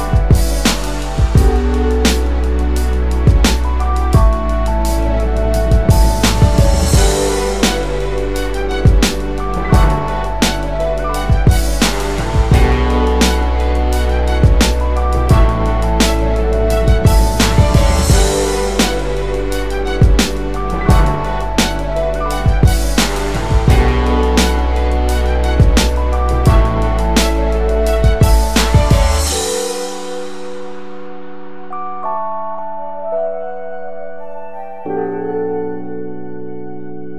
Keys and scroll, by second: 2.6 space, 22.7 space, 23.2 space, 30.3 BackSpace, 36.8 space.